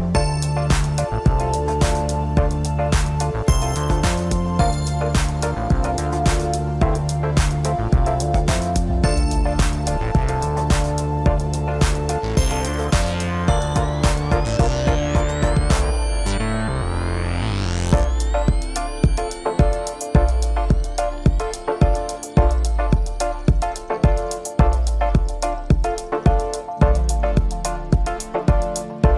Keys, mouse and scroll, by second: 0.9 click, 2.5 click, 3.7 scroll up 1, 5.0-5.9 scroll down 2, 5.9-7.6 middle drag, 7.6 KP_0, 10.1 scroll up 1, 11.0 Tab, 11.7-12.3 scroll up 1, 12.3 click, 14.1-14.6 scroll down 2, 17.7 drag, 18.2-19.0 scroll up 1, 19.0 click, 20.3 Tab, 20.9 scroll up 1, 22.7 Tab, 23.6-24.5 drag, 25.2 click.